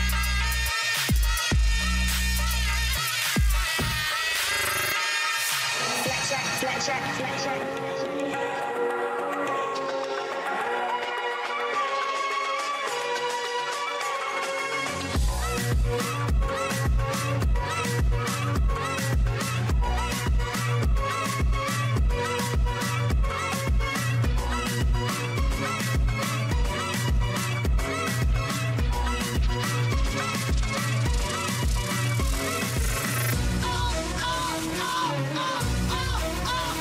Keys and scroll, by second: 4.6 ctrl+v, 27.5 ctrl+alt+BackSpace, 32.7 ctrl+alt+BackSpace, 34.2 ctrl+z, 35.7 ctrl+alt+BackSpace.